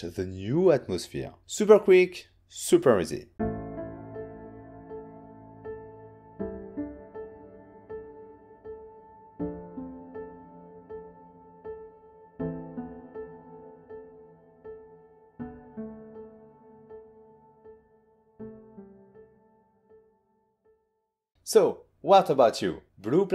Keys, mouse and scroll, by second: 1.2 click.